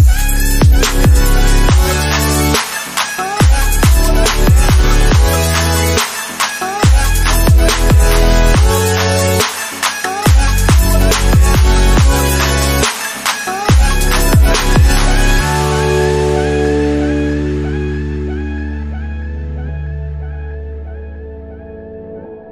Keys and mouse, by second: 0.1 click, 5.1 click, 20.5-22.5 drag.